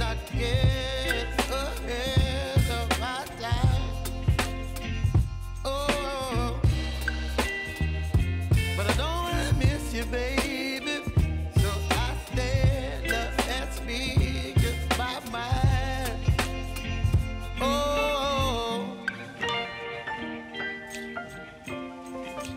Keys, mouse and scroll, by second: 0.7 click, 1.7 v, 2.4-8.5 drag, 8.5 space, 10.8 j, 11.3 click, 11.7 right click, 12.6 click, 17.7 r, 18.4 click.